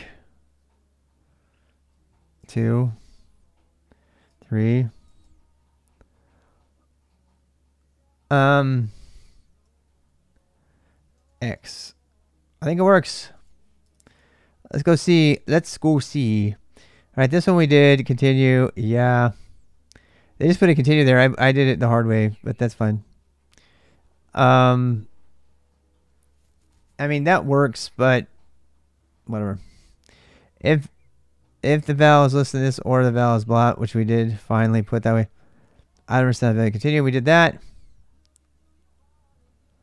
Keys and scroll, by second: 2.1 typing, 4.0-4.8 typing, 8.6-9.5 typing, 11.0-13.6 typing, 12.4 alt+Tab, 15.1-15.9 typing.